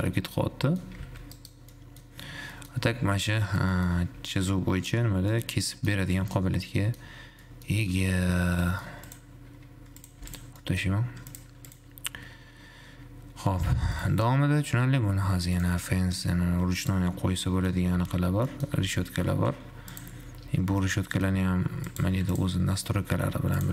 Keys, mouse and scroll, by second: 0.7-1.2 middle drag, 1.2 g, 2.0-3.8 middle drag, 4.0 middle click, 4.2 /, 4.7-5.2 middle drag, 5.2-5.7 scroll up 2, 5.7 middle click, 6.2 scroll up 1, 6.4-6.7 middle drag, 6.7 scroll down 2, 6.9 middle click, 7.2-7.7 scroll up 1, 7.7 middle click, 8.2-8.9 scroll down 8, 8.9-9.3 middle drag, 9.3 click, 9.7 g, 10.4 x, 10.8-11.2 middle drag, 11.2-11.7 scroll up 3, 12.0 click, 15.8-17.7 drag, 17.7-18.9 middle drag, 19.2 g, 20.7 `, 21.2 middle click, 21.7 g, 22.2 g.